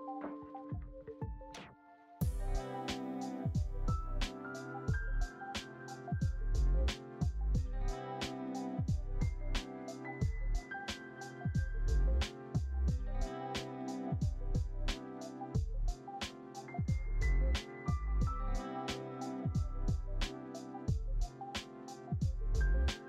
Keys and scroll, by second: 3.5 space, 5.7 ctrl+s, 11.0 z, 12.4 alt+x, 14.6 ctrl+c, 14.7 ctrl+v, 16.3 alt+x, 17.8 ctrl+v, 18.3 alt+x, 19.2 ctrl+c, 19.3 ctrl+v, 21.4 alt+x, 22.4 ctrl+c, 22.7 ctrl+v.